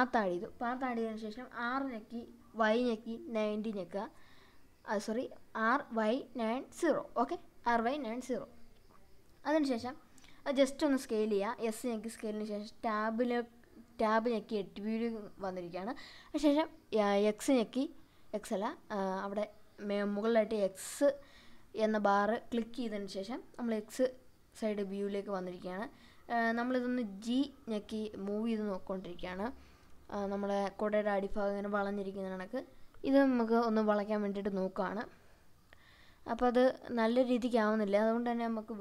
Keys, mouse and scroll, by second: 0.8 r, 2.1 y, 3.2 KP_9, 3.6 KP_0, 4.4 KP_Enter, 4.9-5.2 scroll down 1, 5.2-7.2 middle drag, 7.7 s, 8.9 click, 9.4 middle click, 9.9 w, 10.2 Tab, 10.9 scroll up 1, 11.8 shift+middle click, 14.4 click, 15.9-16.3 scroll up 2, 16.6 shift+middle click, 18.2 click, 19.8 g, 25.5 click, 27.2 ctrl+r, 29.2-29.9 scroll down 2, 30.4 scroll down 1, 31.0-32.2 scroll down 1, 33.6 click, 34.9 ctrl+r, 38.5 scroll up 2.